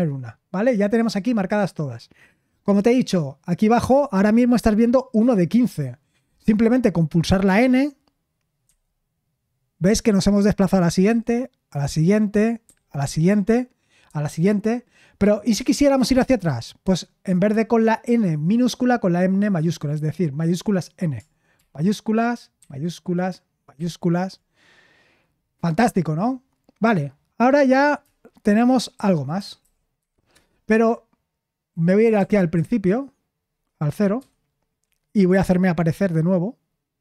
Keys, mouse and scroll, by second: 8.6 typing, 11.0 typing, 12.6 typing, 14.0 typing, 21.5 shift+n, 22.6 typing, 23.7 typing, 29.1-30.4 typing, 32.0 typing, 34.1 typing.